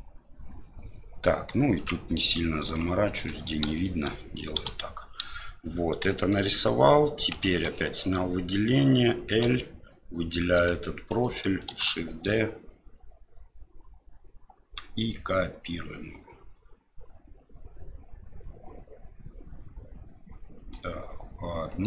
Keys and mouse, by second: 1.7 ctrl+click, 2.7 ctrl+click, 3.8 shift+right click, 4.8 f, 6.1 shift+middle click, 7.5 alt+a, 10.9 shift+middle click, 11.7 l, 11.7 shift+d.